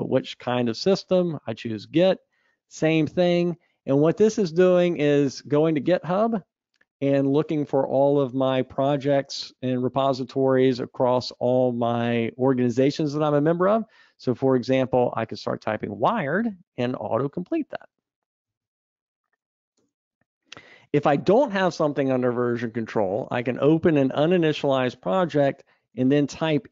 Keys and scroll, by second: 17.9 Escape, 18.6 super+Up.